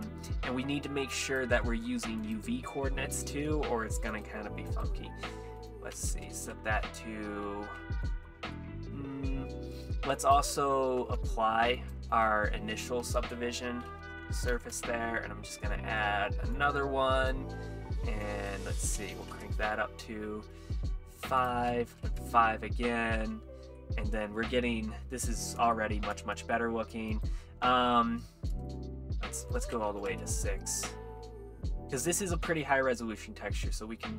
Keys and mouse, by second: 1.3-2.4 drag, 4.1 click, 5.6 click, 8.0 z, 8.6 middle click, 10.2 click, 11.0 ctrl+a, 11.8 click, 12.1-14.8 drag, 16.6 click, 18.3-20.4 drag, 21.4 click, 23.8-24.1 middle drag, 24.5-24.9 middle drag, 25.8 shift+middle drag, 26.6-27.1 shift+middle drag, 27.1 click, 29.5-34.1 drag.